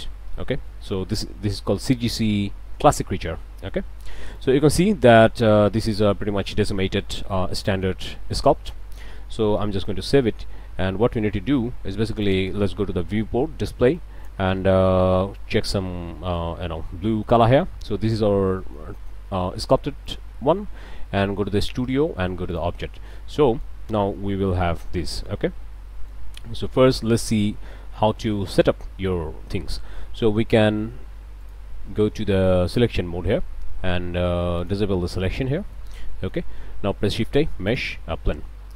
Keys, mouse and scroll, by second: 0.7 click, 3.3-3.8 scroll up 2, 4.0 shift+middle click, 4.5 shift+middle click, 4.7 shift+Tab, 4.8 shift+middle click, 5.8 middle click, 6.2 scroll down 2, 6.6 middle click, 7.7 Tab, 8.3 click, 8.8-9.1 scroll up 2, 9.6 ctrl+s, 10.1 ctrl+shift+click, 12.2 click, 12.8 scroll down 2, 14.2 click, 17.4 click, 18.6 shift+click, 20.1 click, 22.5 click, 23.1 middle click, 23.8 scroll down 2, 24.1 middle click, 24.9 middle click, 25.3 alt+a, 25.5-25.9 alt+scroll up 2, 25.9 alt+click, 27.8 shift+a, 31.4 click, 32.7 click, 34.6 click, 35.4 click, 36.1 click, 36.8 shift+a, 37.7 click, 38.3-38.7 drag.